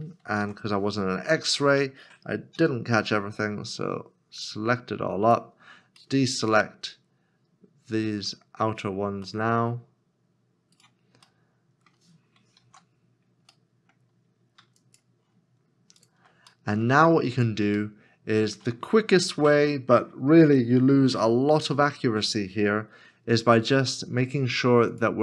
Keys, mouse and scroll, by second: 0.4 alt+z, 1.3 middle click, 2.5 c, 6.0 middle click, 10.8 right click, 11.4 middle click, 13.5 alt+z, 13.7 middle click, 14.0 scroll down 1, 14.8 shift+click, 16.0 shift+click, 16.7 middle click, 17.2 scroll up 1, 18.0 shift+middle click.